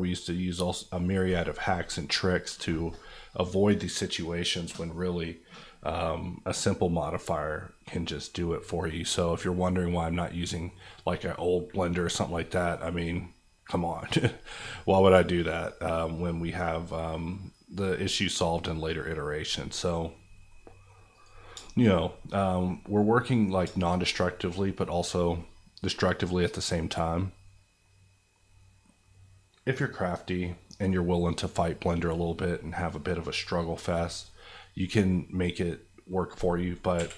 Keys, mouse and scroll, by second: 6.4 scroll down 1, 7.1 middle click, 7.9 scroll down 1, 8.4 middle click, 9.7 middle click, 10.7 scroll down 1, 11.0-18.6 middle drag, 21.1 click, 21.9 middle click, 22.2 scroll up 1, 22.2 middle click, 22.8-33.8 middle drag, 33.9 scroll down 1, 34.8-36.4 middle drag, 36.9 KP_1.